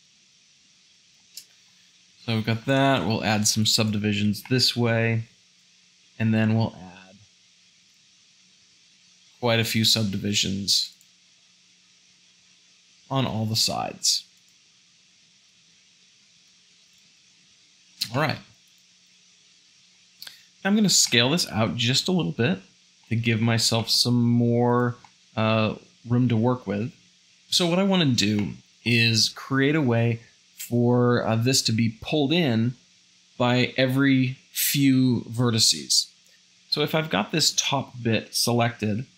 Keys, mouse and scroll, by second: 0.1 g, 2.1 ctrl+r, 5.7 ctrl+r, 8.1 ctrl+r, 11.6 ctrl+r, 15.7 ctrl+r, 17.1 Tab, 18.2-19.7 shift+middle drag, 19.7 a, 21.0 s, 23.8 s, 37.7-39.1 shift+middle drag.